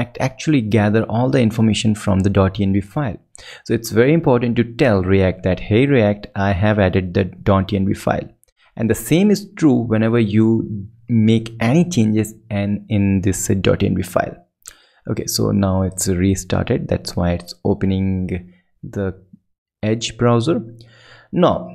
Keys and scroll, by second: 9.8 super+Left, 11.3 shift+super+Left, 13.2 super+Right, 15.1 ctrl+super+Right, 16.9 ctrl+Left, 18.3 ctrl+Right, 19.0 ctrl+super+Right, 19.7 ctrl+alt+super+Left.